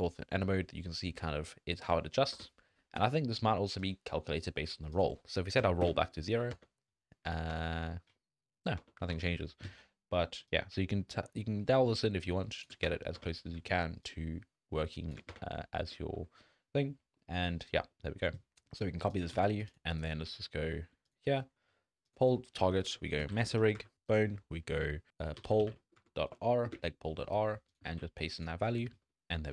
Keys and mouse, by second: 0.0 Tab, 0.1 Tab, 0.3 Tab, 0.5 Tab, 1.4 Tab, 1.8 Tab, 2.3 Tab, 3.0 n, 3.8 click, 4.9 click, 6.5 Tab, 7.3 Tab, 7.5 Tab, 8.8 Tab, 9.1 Tab, 10.5-12.6 drag, 12.8 Tab, 13.2 Tab, 14.1-15.1 shift+drag, 15.8 Tab, 16.1 Tab, 17.2 middle drag, 17.9 click, 19.1 ctrl+click, 20.0-20.5 drag, 22.0-23.9 drag, 24.1-26.6 drag, 26.3 Down, 27.8 ctrl+click, 28.9 click.